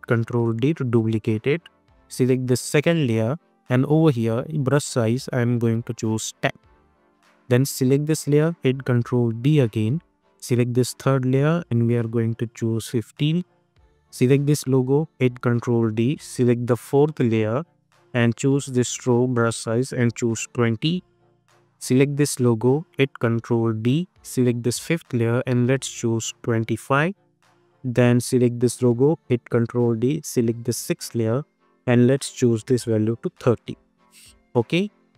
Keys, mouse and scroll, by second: 0.6 ctrl+d, 2.7 click, 9.2 ctrl+d, 10.3 click, 13.3 Return, 14.4 click, 15.2 ctrl+d, 15.7 scroll down 1, 16.3-16.9 scroll, 16.9-17.5 scroll up 1, 17.5 click, 17.9-19.5 scroll down 1, 19.5 click, 21.6-22.2 scroll up 1, 22.2 click, 23.0 ctrl+d, 24.3 click, 24.8-26.1 scroll down 1, 26.1 click, 27.1 Return, 27.6 scroll up 1, 28.2 click, 29.2 ctrl+d, 30.2 click, 31.0 scroll down 1, 32.1 click, 33.3 Return, 33.9 scroll up 1, 34.7 click.